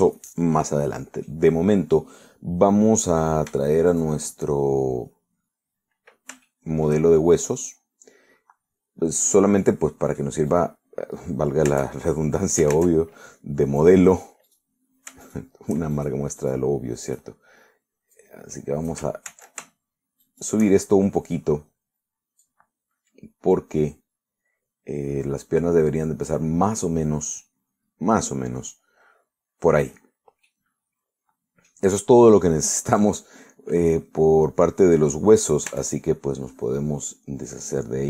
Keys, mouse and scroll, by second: 2.3 middle click, 3.5 scroll down 1, 5.0 shift+click, 7.5 shift+middle click, 9.5 middle click, 9.5 scroll up 2, 10.7 right click, 11.6 right click, 12.7 Tab, 13.8 ctrl+Tab, 14.9 click, 15.5 right click, 16.3 shift+right click, 17.0 shift+right click, 17.5 shift+right click, 18.1 right click, 19.2 click, 20.4 ctrl+z, 21.3 shift+right click, 21.8 shift+middle click, 23.5-31.1 drag, 31.5-32.9 middle drag, 36.8 Tab.